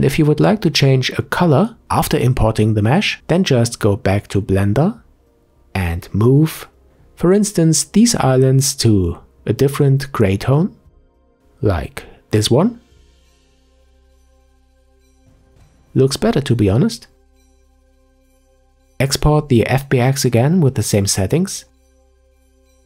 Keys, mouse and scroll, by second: 1.5 Tab, 5.7 Tab, 7.0 a, 9.6 click, 12.3 g, 15.3 Tab, 16.0-18.5 middle drag, 18.5-21.7 drag.